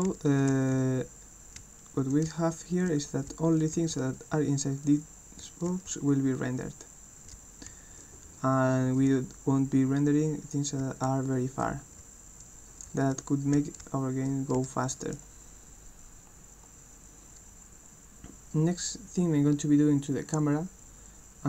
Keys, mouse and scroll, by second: 0.0-6.4 typing, 7.4 w, 7.7 a, 9.0 w, 11.0-14.5 typing.